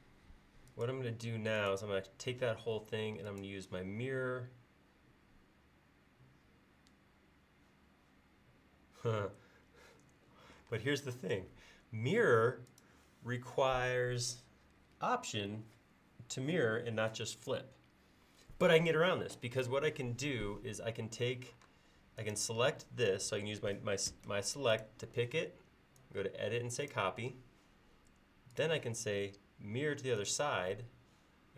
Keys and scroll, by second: 10.7 space, 21.7 space, 24.1 space.